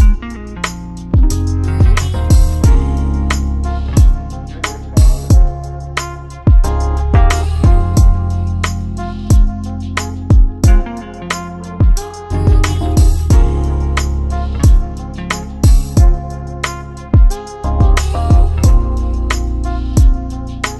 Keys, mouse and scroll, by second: 0.6 click, 6.2 click, 7.5 click, 8.7 click, 13.7 click, 14.4 right click, 17.4 click.